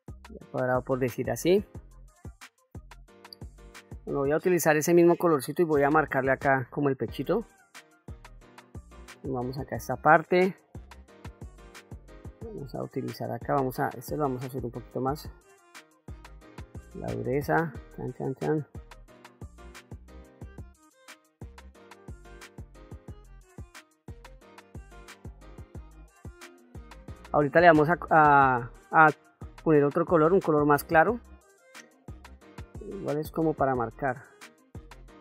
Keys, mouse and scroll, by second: 1.2 click, 2.3-3.3 middle drag, 3.6 middle click, 4.9 click, 6.4 shift+middle click, 7.1 middle click, 8.2 ctrl+middle click, 9.0 shift+middle click, 10.0 middle click, 11.3-12.8 drag, 13.5 shift+f, 14.7 shift+f, 15.3-19.0 drag, 19.1 middle click, 19.3 click, 19.8 middle click, 20.0 click, 20.1 click, 20.9 middle click, 21.1 click, 21.7 middle click, 21.9 click, 23.3 click, 23.7 middle click, 23.9 click, 24.8 f, 25.1 click, 25.6 shift+middle click, 25.9 click, 26.2 click, 26.6 click, 28.2 click, 29.0 middle click, 30.0 ctrl+middle click, 30.8 shift+middle click, 31.9-33.0 drag, 33.3 middle click, 35.0 f.